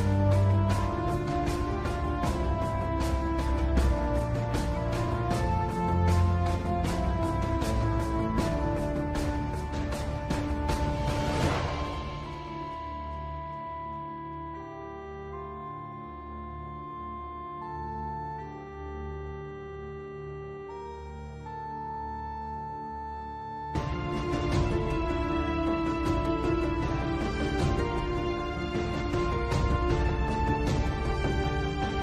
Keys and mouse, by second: 1.0 click, 4.1 h, 5.0 middle click, 5.9-6.9 middle drag, 8.3 KP_7, 11.9 click, 13.5 s, 18.6 click, 29.0-30.0 drag, 31.2 click.